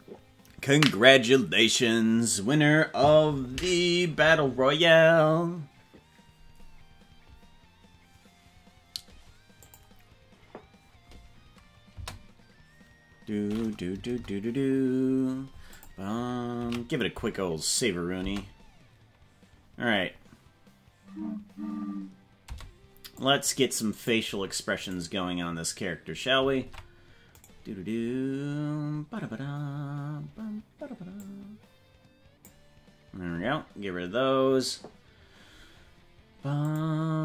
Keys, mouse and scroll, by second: 17.2 ctrl+s, 18.2 space, 22.5 space, 23.2 click, 24.9 right click, 26.6 ctrl+Tab, 27.4-28.5 right drag, 31.3-32.5 drag, 36.6 click.